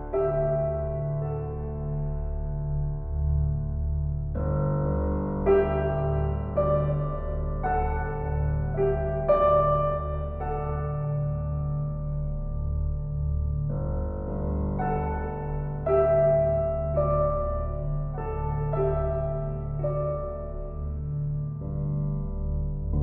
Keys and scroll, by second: 0.5 shift+s, 3.5 shift+s, 6.5 shift+s, 8.2 s.